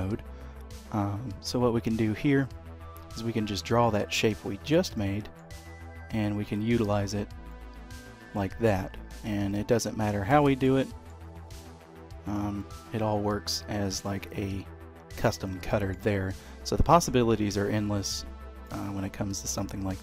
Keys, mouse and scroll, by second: 2.3 click, 4.9 middle click, 7.5 middle click, 9.2 click, 10.8 middle click, 12.6 middle click, 15.4 middle click, 17.2 click.